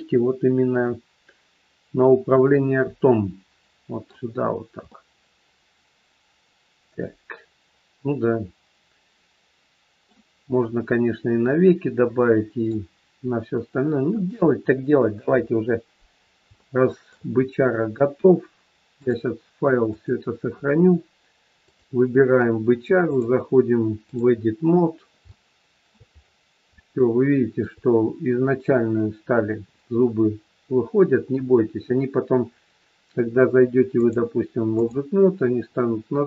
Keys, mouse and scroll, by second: 4.4 scroll down 1, 4.8 middle click, 10.4 scroll down 1, 11.4 middle click, 14.0 KP_1, 15.2 KP_3, 15.5 scroll down 1, 16.2 scroll down 3, 16.5 shift+middle click, 18.9 click, 21.5 click, 24.8 click, 24.8-25.2 scroll up 2, 25.2 shift+middle click, 26.1-26.7 scroll up 4, 26.8 shift+middle click, 33.9 click.